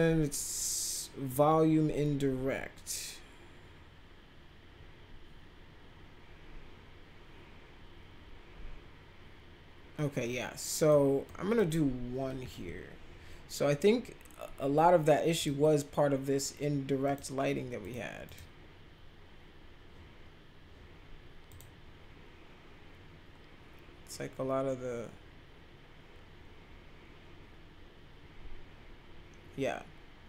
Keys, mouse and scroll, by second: 10.7 click, 11.2 click, 12.4 1, 15.3 click, 17.0 click, 17.8 click, 18.2 click, 21.4 click.